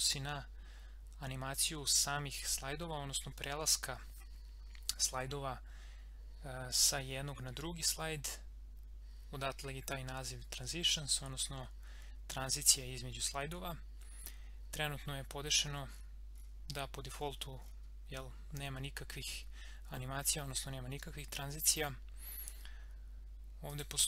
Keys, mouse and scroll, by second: 15.3 scroll down 1, 17.1 scroll up 1, 23.6 click.